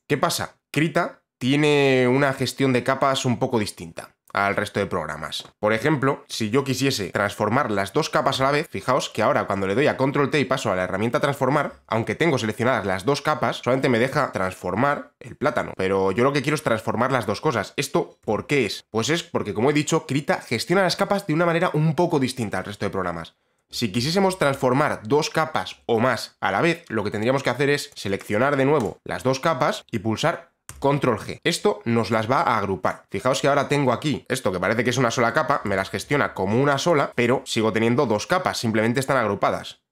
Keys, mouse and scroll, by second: 0.1 click, 0.8 click, 6.8 click, 8.5 ctrl+t, 14.6 click, 15.7 ctrl+z, 15.7 shift+click, 16.6 click, 18.3 b, 27.9 click, 28.3 click, 28.9 ctrl+click, 30.8 ctrl+g, 32.2 click, 33.7 click, 34.2 click, 35.5 click, 35.9 click, 37.0 click.